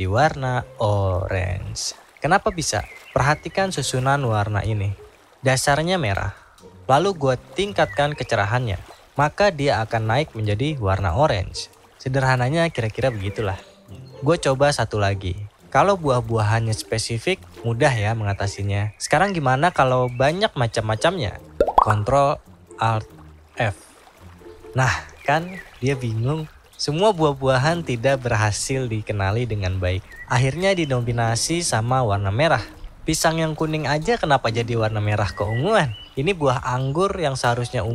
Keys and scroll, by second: 21.8 ctrl+alt+f.